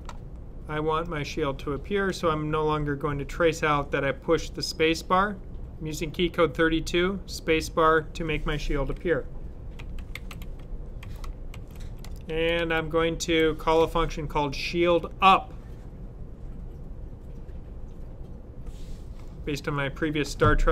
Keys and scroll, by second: 9.4-13.1 typing.